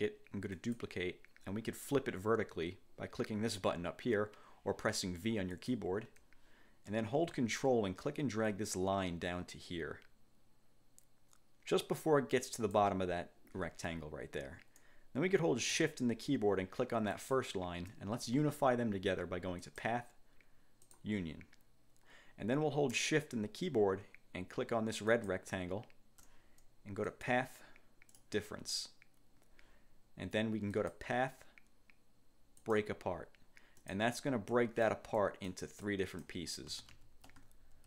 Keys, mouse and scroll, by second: 0.7 click, 5.7 click, 8.1-13.1 ctrl+drag, 17.3 shift+click, 19.7 click, 20.9 click, 25.2 shift+click, 27.2 click, 28.2 click, 30.9 click, 32.7 click, 33.9 click, 34.6 click, 35.9 click, 36.8 ctrl+z.